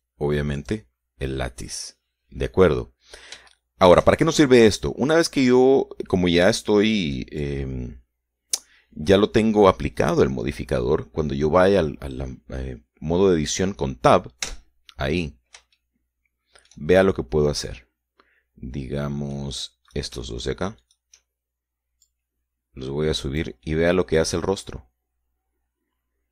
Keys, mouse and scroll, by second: 0.9 Escape, 1.1 click, 1.9 click, 4.8 shift+middle click, 5.9 middle click, 8.0 shift+middle click, 15.8 Tab, 17.1-18.2 shift+middle drag, 19.1-20.9 middle drag, 21.2 right click, 22.1 shift+right click, 23.4-24.9 drag, 25.0 middle click, 26.0-26.3 drag.